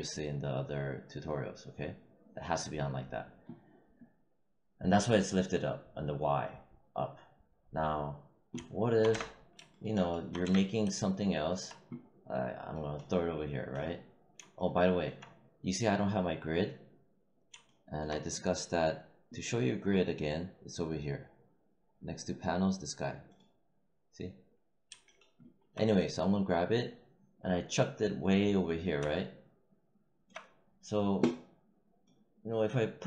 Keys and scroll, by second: 9.0 space, 10.3 space.